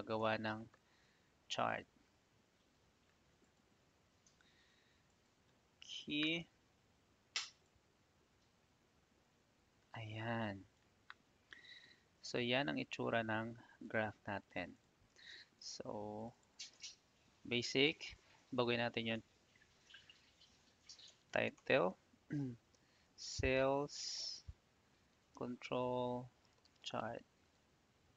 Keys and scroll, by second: 15.5 ctrl+a, 18.4 shift+c, 20.7-22.0 typing, 23.0 s, 23.5 space, 24.8-28.0 typing.